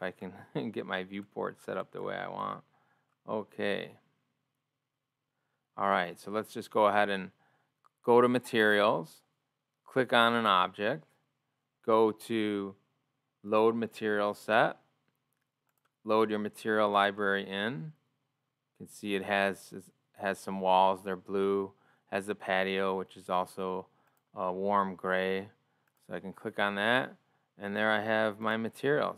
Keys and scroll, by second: 2.9 ctrl+o, 6.8 ctrl+o.